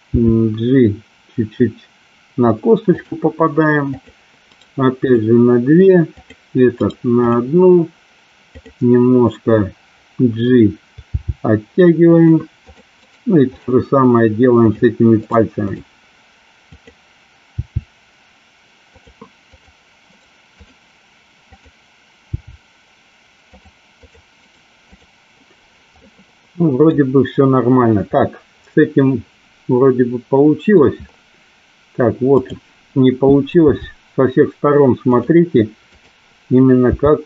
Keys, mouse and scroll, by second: 0.1 g, 3.9 click, 4.6 right click, 7.0 right click, 11.3 g, 12.1 click, 12.8 click, 13.1 right click, 14.8 click, 15.3 right click, 17.7 g, 19.0 click, 20.1 right click, 21.5 click, 22.4 g, 24.0 click, 24.6 right click, 26.0 middle click, 28.3-30.9 middle drag, 32.4 click, 33.6 g, 35.3 click, 35.9 click, 36.9 g.